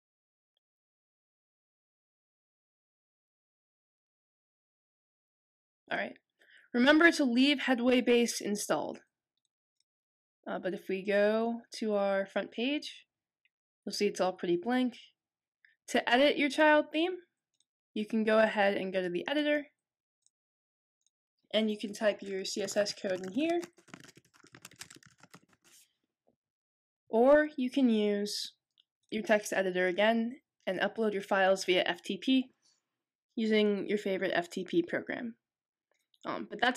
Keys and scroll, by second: 22.3-26.0 typing, 27.0 typing.